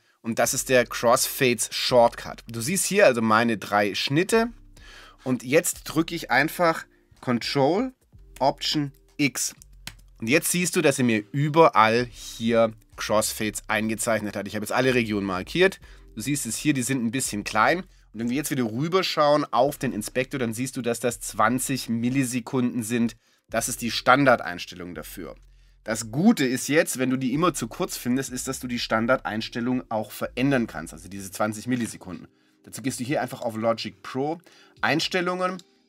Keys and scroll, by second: 9.9 ctrl+alt+x.